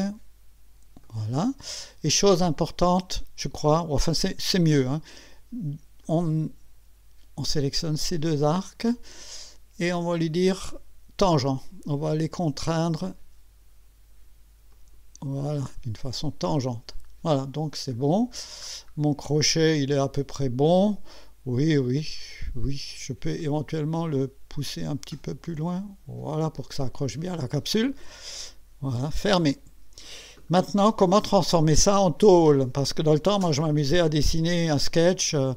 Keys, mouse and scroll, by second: 1.0 click, 1.8 scroll up 1, 2.4 right click, 4.0 right click, 6.0 click, 8.4 click, 14.7 click, 16.5 click, 17.6 scroll up 1, 18.0-18.3 scroll down 2, 18.7 scroll down 2, 23.4-26.5 drag, 29.1 click, 30.4-33.0 drag.